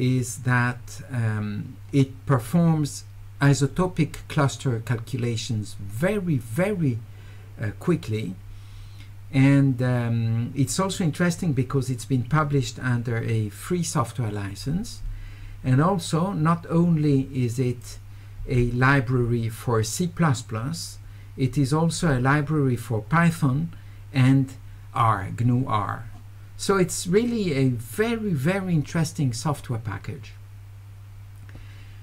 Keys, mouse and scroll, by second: 11.1 middle click, 11.1-11.6 scroll up 2, 17.8 click.